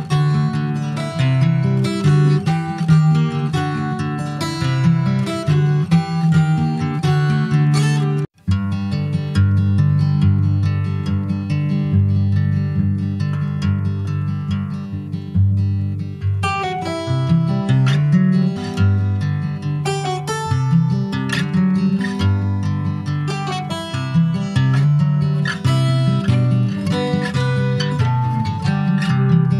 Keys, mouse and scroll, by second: 0.8 ctrl+s, 1.1 /, 1.8 click, 2.2-3.3 middle drag, 3.3 click, 3.7-5.2 middle drag, 5.2 ctrl+s, 5.3 click, 5.7 scroll up 2, 5.9-7.2 middle drag, 7.2-10.1 right drag, 10.1 click, 11.8 middle click, 12.6 alt+z, 13.3 Tab, 14.0 click, 15.7 click, 17.7 middle click, 18.3 alt+z, 18.5-19.8 middle drag, 19.8 click, 20.5 Tab, 21.1 middle click, 22.0 click, 24.6 click, 25.2 scroll down 2, 25.3 middle click, 25.9-26.3 scroll down 1, 26.3 shift+middle click, 26.9-27.4 scroll up 2, 27.4 ctrl+s, 27.6 shift+middle click, 28.4 ctrl+s, 28.5-29.5 middle drag.